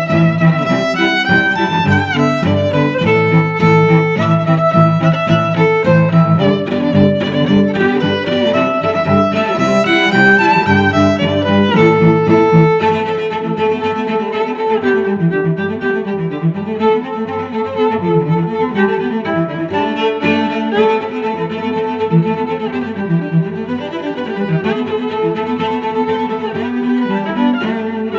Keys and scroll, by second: 0.0 space, 0.8 m, 9.7 Escape, 10.7 Escape, 11.4 Escape, 13.6 Escape, 22.4 1, 22.5 Return, 22.7 1, 22.8 Return, 23.2 Escape, 23.3 Escape, 27.3 Escape, 27.3-28.1 typing.